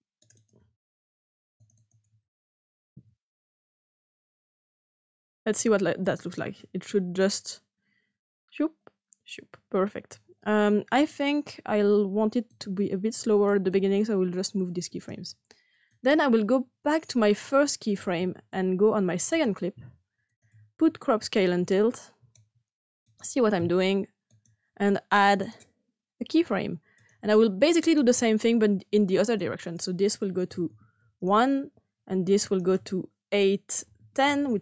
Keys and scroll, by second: 2.7-4.2 typing, 4.2 Return, 30.6-31.1 typing, 33.4-34.6 typing.